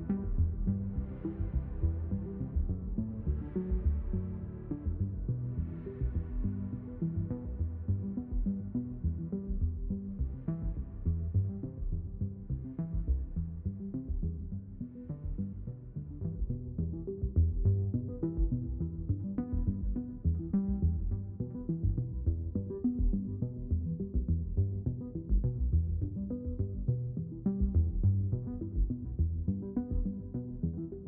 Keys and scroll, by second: 1.7 ctrl+z, 2.5 ctrl+z, 17.9 ctrl+z, 18.3 ctrl+z, 28.0 ctrl+z.